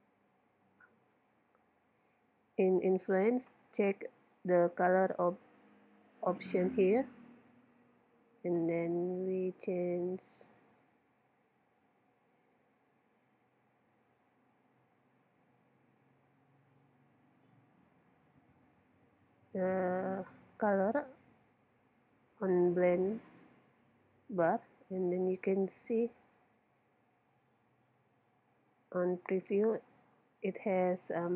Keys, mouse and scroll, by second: 7.6-9.3 drag, 23.3-25.1 drag, 28.4-30.3 drag.